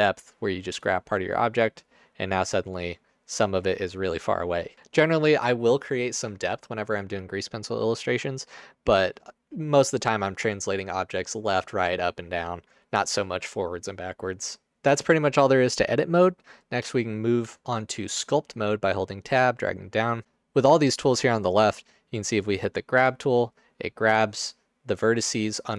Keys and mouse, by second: 1.4 middle click, 4.8 ctrl+z, 4.8 Tab, 4.8 KP_0, 17.5 Tab.